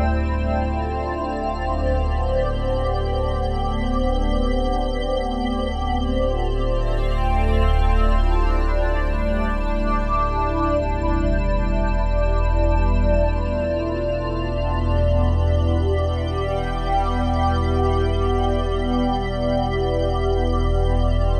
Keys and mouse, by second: 0.3 ctrl+z, 0.8 ctrl+z, 1.6 ctrl+z, 2.2 ctrl+z, 2.6 ctrl+z, 3.1 ctrl+z, 3.7 ctrl+z, 4.5 ctrl+z, 5.2 ctrl+z, 6.6 ctrl+z, 8.6 ctrl+alt+click, 10.8 ctrl+alt+click, 12.7 Tab, 14.1 ctrl+alt+click, 17.1 click, 19.0 click.